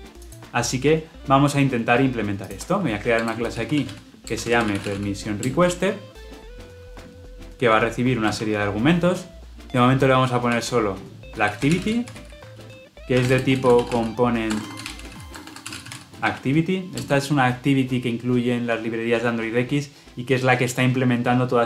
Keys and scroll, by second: 4.2 Return, 16.9 Return.